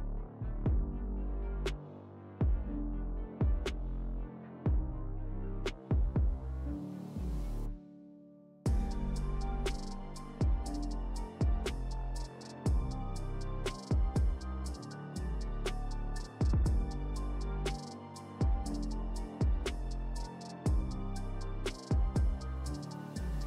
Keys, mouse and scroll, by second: 1.5 click, 1.6-2.3 shift+click, 5.0 scroll up 1, 5.1 scroll down 1, 8.3-8.9 scroll up 1, 9.3-10.2 drag, 18.3 click, 21.6-23.4 drag.